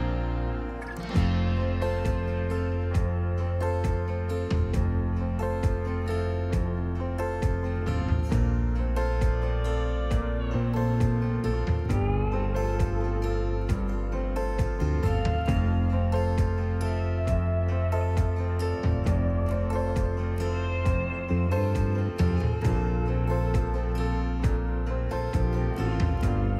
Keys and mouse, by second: 1.7 click, 2.3 s, 2.7 x, 5.3 click, 5.8-7.7 drag, 11.7 n, 13.5 click, 16.3 click, 17.7-20.6 drag, 22.8-24.5 drag.